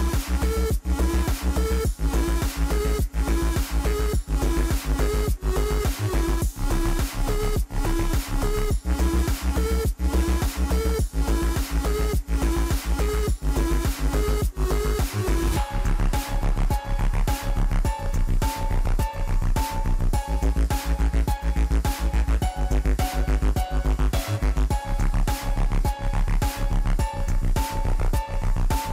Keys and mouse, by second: 1.2 click, 2.9 click, 3.9 click, 5.0-6.2 middle drag, 7.5-8.2 middle drag, 8.6 KP_4, 8.8 KP_1, 9.9-10.5 shift+middle drag, 11.0 shift+a, 12.1 click, 12.5-13.0 middle drag, 13.7 shift+a, 15.0 KP_0, 16.0 n, 16.6 click, 17.0 click, 18.1-18.4 shift+middle drag, 19.1 shift+middle click, 21.6-22.0 drag, 23.3 click, 23.7 drag, 24.6 click, 24.8 click, 25.2 click, 25.8-27.3 drag, 26.6 KP_0, 28.1 shift+middle click, 28.8 click.